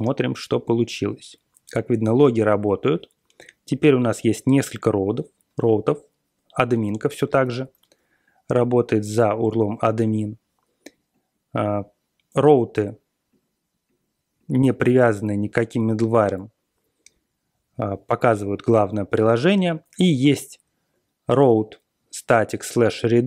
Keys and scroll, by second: 1.4 typing, 7.4 super+[.